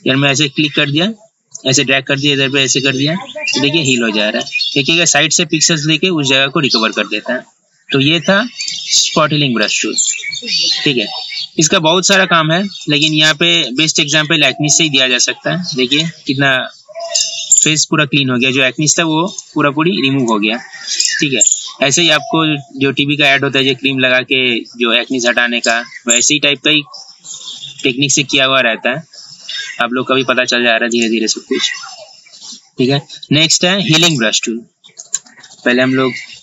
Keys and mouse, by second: 8.8 right click, 10.1 click, 19.2 click, 31.0 right click, 34.1 click, 35.5 ctrl+z, 35.7 ctrl+z, 35.8 ctrl+z, 36.1 ctrl+z, 36.3 ctrl+z.